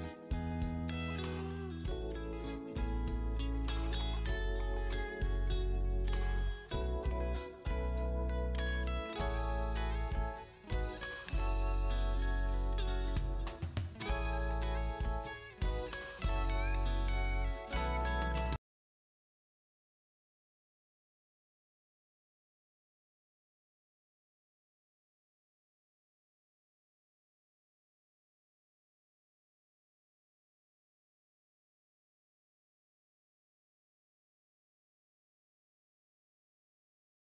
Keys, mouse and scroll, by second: 21.0 space, 21.9 space, 22.5 click, 26.2 click.